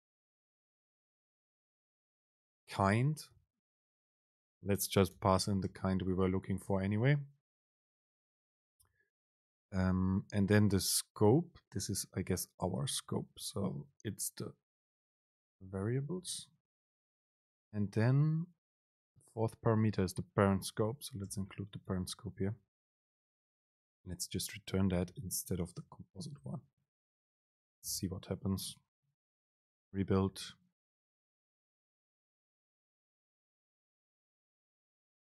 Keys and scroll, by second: 5.8 super+space, 8.8 super+p, 11.5 Up, 12.5 Down, 13.2 End, 14.0 Left, 16.1 super+space, 18.1 super+p, 21.3 super+space, 22.9 Down, 23.3 Up, 24.1 shift+Left, 25.5 Down, 25.7 End, 26.1 Left, 27.4 super+v, 27.5 Up, 28.1 BackSpace, 29.6 ctrl+shift+super+F9.